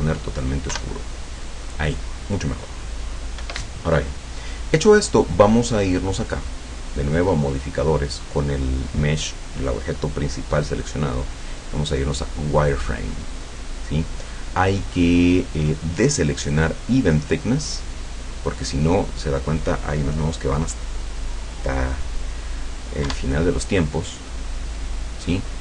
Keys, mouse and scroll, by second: 0.8 F12, 3.4 Escape, 6.5 click, 10.8 click, 12.6 click, 17.9 click, 18.4 click, 23.1 F12.